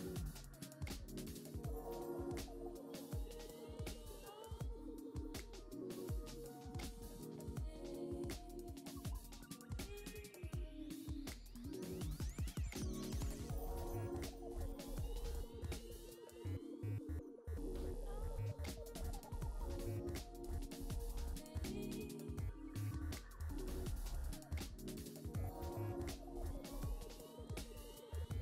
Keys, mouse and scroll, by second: 0.4-1.9 shift+middle drag, 2.8-4.2 drag, 4.2-4.9 scroll down 2, 4.9-6.4 middle drag, 7.4-7.7 scroll down 2, 7.7-9.2 middle drag, 10.8 KP_3, 11.6 shift+middle click, 12.4-12.9 scroll up 5, 13.0 shift+middle click, 14.1-15.5 scroll up 1, 15.5-16.9 drag, 17.6-19.0 drag, 20.1-20.5 scroll down 4, 20.5 middle click, 21.3 scroll down 2, 21.5-23.1 middle drag, 24.9 shift+middle click, 25.8-26.5 scroll up 3, 26.5-27.9 scroll down 1, 27.9 scroll down 1, 28.2-28.4 drag.